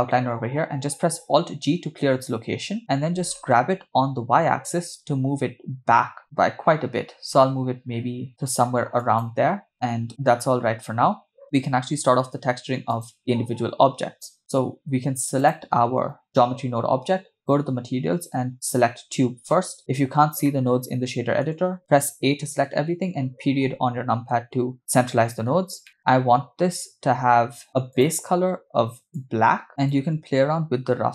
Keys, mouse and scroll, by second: 1.4 alt+g, 3.5 g, 9.7 middle click, 9.7 scroll down 2, 12.9 click, 15.4-15.8 drag, 17.4 click, 18.5 click, 20.5-21.6 middle drag, 22.3 a, 23.6 KP_Decimal, 25.6-26.3 scroll up 5, 25.9 middle click, 27.9 click, 29.9-31.1 shift+drag.